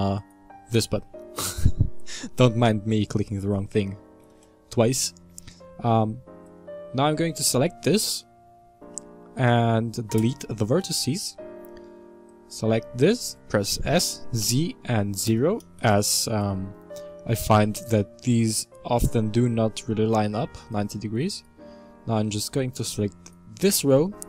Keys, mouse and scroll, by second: 0.2 click, 2.0 scroll up 2, 4.2 a, 4.3 a, 6.5 click, 10.4 x, 12.3 click, 13.7 s, 20.7 click, 22.8 click.